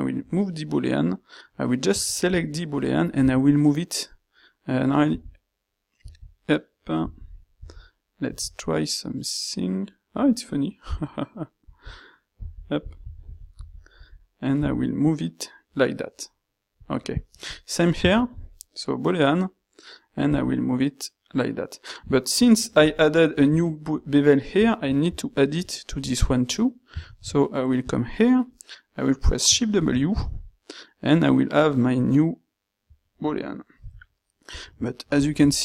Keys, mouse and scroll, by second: 18.0 ctrl+shift+q, 27.1 ctrl+shift+q.